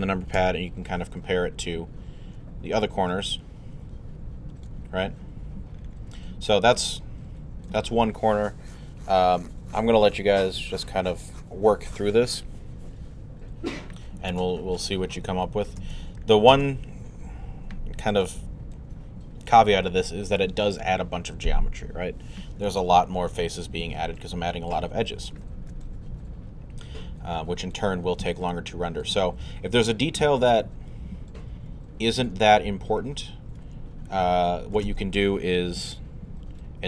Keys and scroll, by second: 0.4 alt+q, 1.0 q.